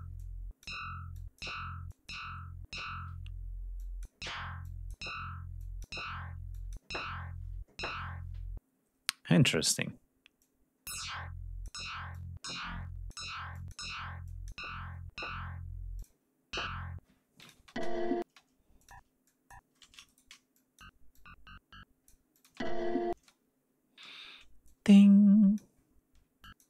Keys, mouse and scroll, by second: 0.2 click, 1.2 click, 1.9 click, 3.8 click, 4.6 click, 5.6 click, 6.5 click, 10.4-11.9 drag, 12.1 click, 13.5 click, 14.3 click, 16.0 click, 17.4 click, 17.6 space, 18.3 space, 18.8 click, 19.3 click, 20.1 shift+right click, 20.6 shift+click, 21.2 shift+click, 22.4 click, 22.5 space, 23.2 space, 24.1 g, 24.7 click, 26.2 d, 26.5 click.